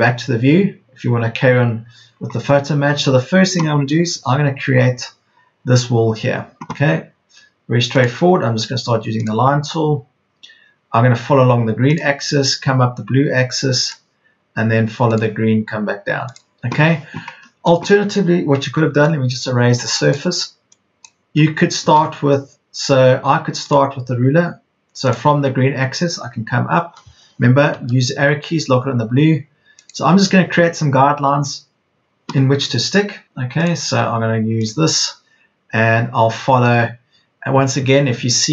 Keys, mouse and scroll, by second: 1.7 scroll down 1, 2.3 scroll up 1, 3.1 scroll down 1, 7.9-17.2 drag, 17.2-18.2 scroll up 1, 18.2 scroll down 1, 18.9 click, 22.3 space, 23.6 click, 27.7 Up, 29.7 click.